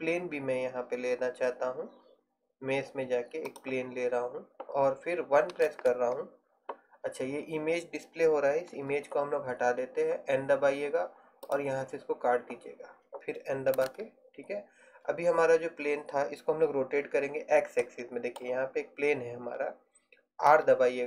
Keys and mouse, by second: 5.8 KP_1, 8.9 n, 11.5 click, 14.0 n, 20.6 r.